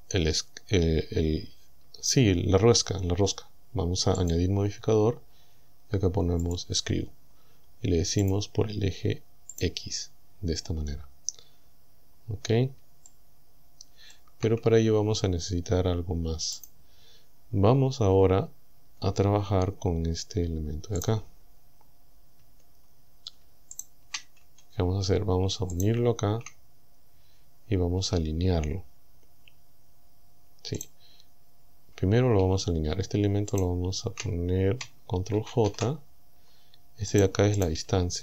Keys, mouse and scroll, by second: 1.2 scroll down 2, 4.2 click, 6.5 click, 8.3 click, 9.6 click, 10.3-10.6 scroll down 2, 11.4-11.7 scroll up 2, 12.1 scroll down 2, 12.9 shift+scroll down 2, 13.1-14.3 shift+middle drag, 14.7-15.2 scroll up 2, 15.2-15.5 scroll down 2, 16.6 click, 18.8 Tab, 21.1 right click, 22.4 Tab, 23.8 shift+right click, 24.5 Tab, 25.8 shift+right click, 30.8 right click, 33.6 shift+right click, 35.4 ctrl+j, 37.2 right click, 37.6 right click, 37.9 Tab.